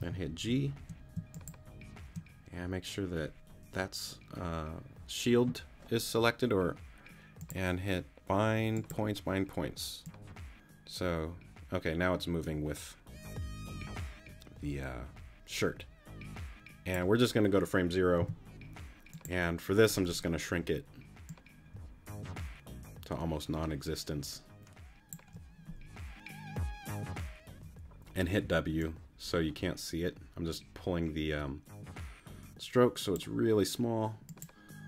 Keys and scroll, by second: 0.0 g, 18.2 t, 28.3 w.